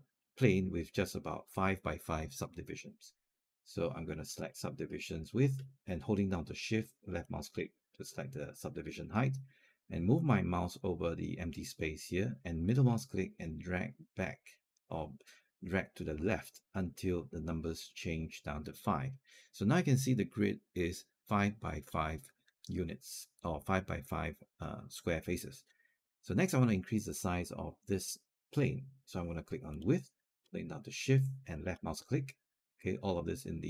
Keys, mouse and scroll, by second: 4.2 click, 6.9 shift+click, 12.7-18.4 middle drag, 29.5 click, 31.3 shift+click.